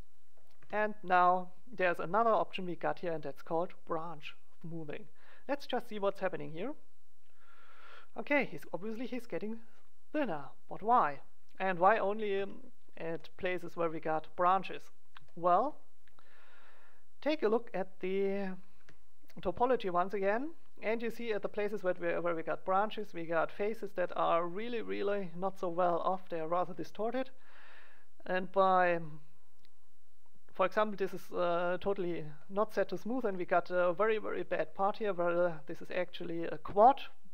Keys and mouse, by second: 0.1 click, 0.5 Tab, 1.6 middle click, 5.5-7.3 drag, 12.3 Tab, 13.1 click, 17.3-18.7 drag, 18.7 z, 19.0 click, 20.9 middle click, 28.9-30.7 drag, 30.7 middle click, 35.8-37.3 drag.